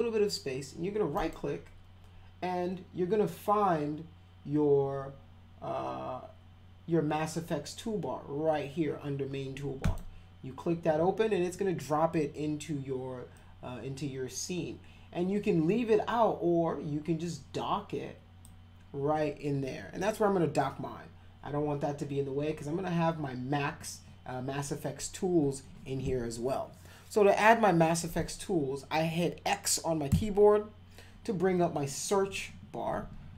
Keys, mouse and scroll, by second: 1.1 right click, 9.8 click, 13.4-18.4 drag, 30.1 x.